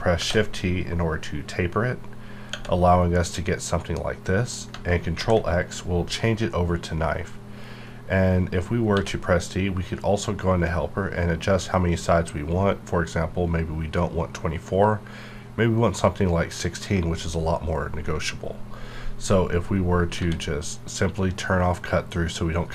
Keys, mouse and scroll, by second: 0.2 shift+t, 2.5 Tab, 4.7 Tab, 5.1 ctrl+x, 8.9 d, 10.8-12.5 ctrl+scroll down 1, 12.5-13.0 ctrl+scroll up 1, 13.0 ctrl+scroll down 1, 13.2 ctrl+scroll up 1, 13.9-14.9 ctrl+scroll down 1, 14.9-17.0 ctrl+scroll up 1, 20.1 ctrl+scroll up 1, 20.2 d.